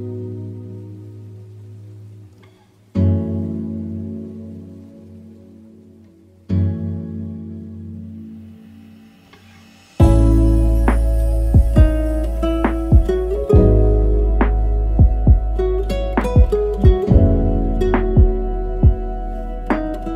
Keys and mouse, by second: 0.0 =, 0.9-1.2 middle drag, 2.2 shift+middle click, 2.4 middle drag, 3.2 click, 3.7-5.3 drag, 11.7 middle click, 12.3-13.1 shift+middle drag, 14.0 click, 14.3 shift+middle click, 14.9 n, 16.2 click, 17.3 click, 19.4 r.